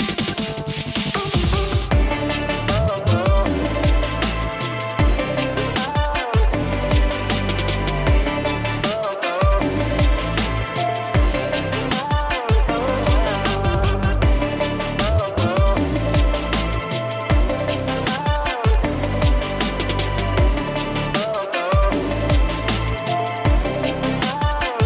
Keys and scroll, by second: 5.1 space, 5.8 ], 5.9 ], 5.9 ], 8.6 space, 10.4 space, 19.3 alt+space, 20.0-20.8 typing.